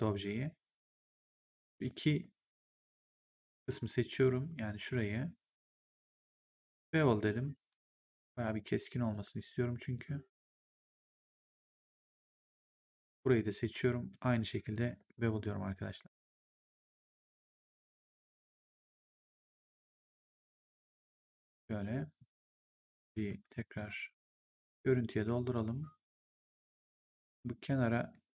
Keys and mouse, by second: 0.8 right click, 1.3 click, 2.8 shift+click, 6.7 click, 9.9 click, 12.9 click, 14.6 shift+click, 16.7 click, 17.8 click, 19.9 click, 23.2 f, 23.7 click, 24.0 f, 27.9 right click.